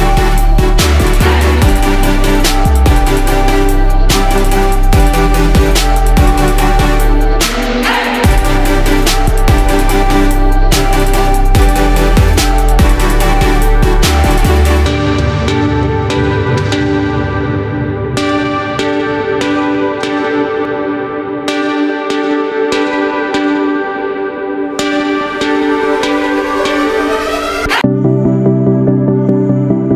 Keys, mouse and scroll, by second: 3.9 ctrl+d, 4.5 ctrl+d, 5.0 ctrl+d, 5.7 click, 6.6 shift+click, 7.1 shift+click, 7.6 shift+click, 8.0 shift+click, 9.5 click, 11.6 ctrl+g, 13.0 click, 15.1 Down, 15.6 Down, 15.7 typing, 18.1 click, 20.3 shift+9, 23.8 Down, 24.3 Down, 24.3 typing, 26.5 click, 27.9 ctrl+shift+g, 28.6 ctrl+shift+g.